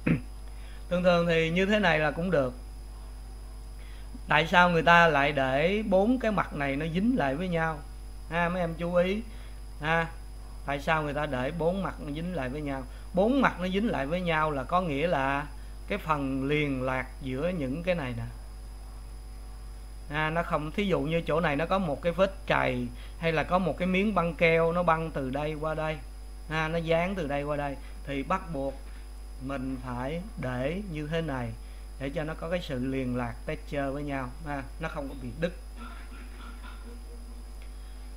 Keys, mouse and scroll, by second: 0.4-9.0 middle drag, 9.0 click, 9.9 click, 11.1 click, 12.0-15.3 middle drag, 15.3-16.2 scroll up 3, 18.3-38.0 middle drag, 38.0 click.